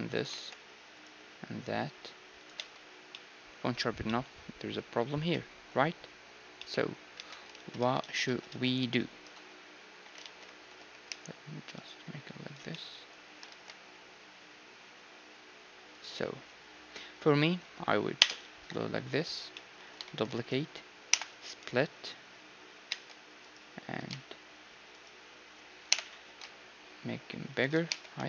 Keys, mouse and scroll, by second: 0.3 ctrl+r, 2.5 Tab, 2.7 middle click, 7.2 Tab, 7.5 ctrl+z, 7.8 ctrl+z, 8.0 ctrl+z, 8.2 ctrl+z, 8.2 middle click, 8.5 ctrl+z, 8.8 ctrl+z, 9.5 z, 9.7-11.1 scroll up 1, 9.9 z, 11.1 middle click, 11.1 i, 11.9 click, 12.7-14.4 middle drag, 13.6 alt+s, 18.2 ctrl+KP_Add, 19.0 middle click, 19.5-21.5 middle drag, 20.0 shift+d, 21.1 p, 22.9 Tab, 23.5 right click, 23.9 s, 24.3-25.4 drag, 25.9 ,, 26.3 s, 27.9 h, 28.2 right click.